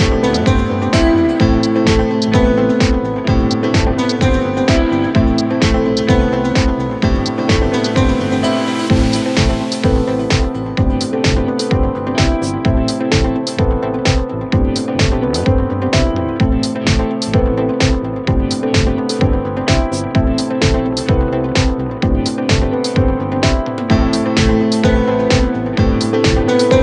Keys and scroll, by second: 10.6 F1, 23.3 shift+z.